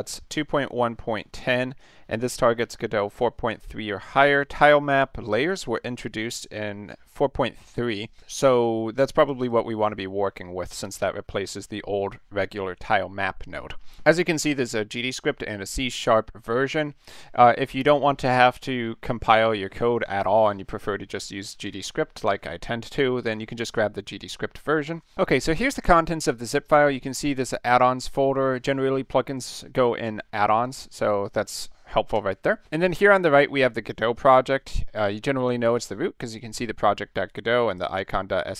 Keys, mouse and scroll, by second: 1.8-2.7 drag, 4.1 click, 6.9-8.1 drag, 8.2-9.2 drag, 9.4 click, 30.5 click, 30.7 click, 31.5 click, 32.1 BackSpace, 34.1 click, 35.7 click, 37.7 click.